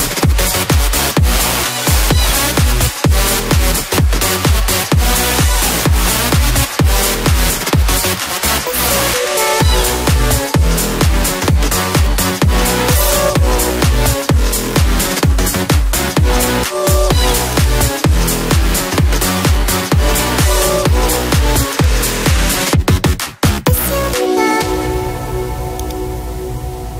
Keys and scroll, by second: 1.4 Return.